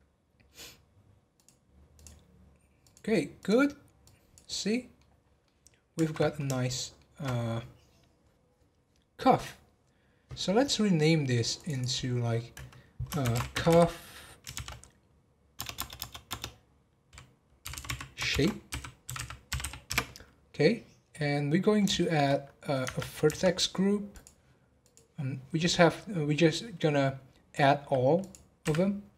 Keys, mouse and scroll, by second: 1.9 click, 2.8 click, 3.4 click, 4.0-5.2 drag, 5.2 scroll down 1, 5.4-9.6 middle drag, 11.5 click, 11.7-13.7 drag, 13.7 f, 15.8 BackSpace, 16.3 BackSpace, 17.8 f, 21.6 scroll down 1, 21.9 shift+middle click, 22.8 Tab, 24.1-25.7 drag, 25.7-28.2 scroll down 2, 28.2 click.